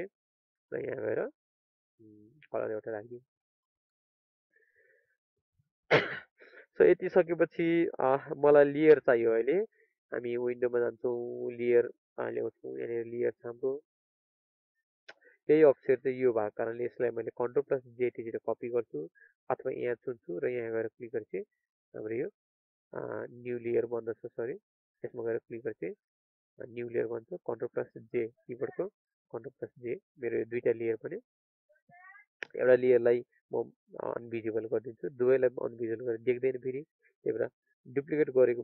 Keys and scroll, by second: 28.9 ctrl+j.